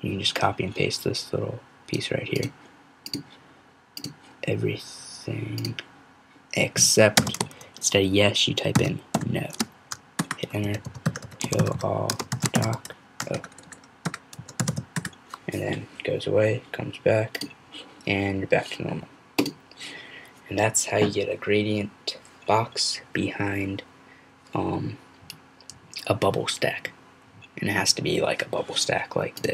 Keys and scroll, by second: 8.7-9.1 typing, 10.4-15.2 typing.